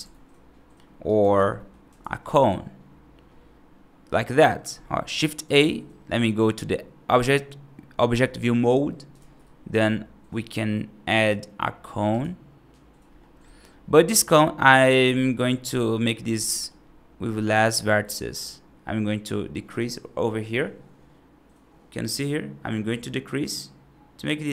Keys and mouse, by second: 0.9 alt+right click, 1.4 middle click, 1.8 shift+a, 6.0 F2, 9.0 shift+a, 14.2-14.7 middle drag, 15.5-15.8 middle drag, 16.3 middle drag, 18.3-24.5 drag.